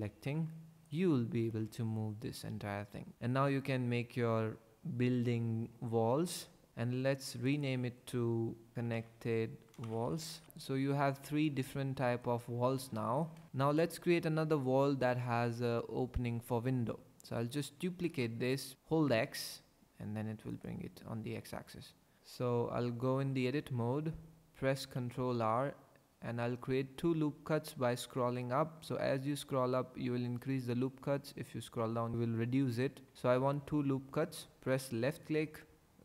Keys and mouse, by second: 0.1 ctrl+j, 1.4 r, 1.6 z, 7.6-10.4 drag, 8.7 ctrl+z, 8.7 n, 10.3 l, 11.5 click, 18.1 shift+d, 19.2 x, 20.5 click, 22.2 ctrl+z, 23.3 Tab, 25.0 ctrl+r, 35.1 click.